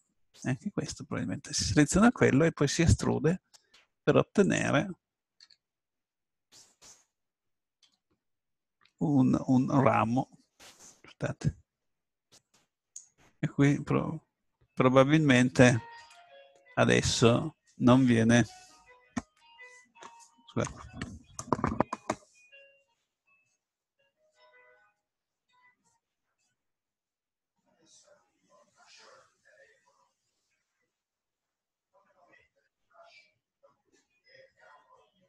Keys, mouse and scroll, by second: 1.5-2.9 middle drag, 3.0 e, 4.6 click, 5.4 s, 7.8 e, 10.7-14.1 drag, 12.3 right click.